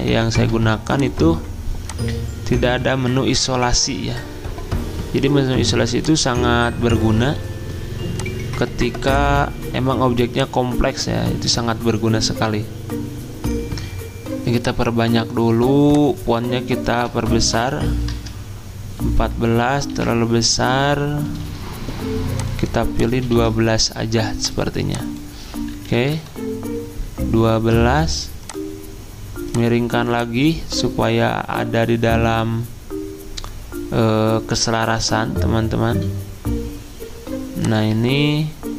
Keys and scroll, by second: 0.4 Delete, 17.4-18.3 typing, 19.9 ctrl+a, 23.4 ctrl+a, 25.5-26.4 typing.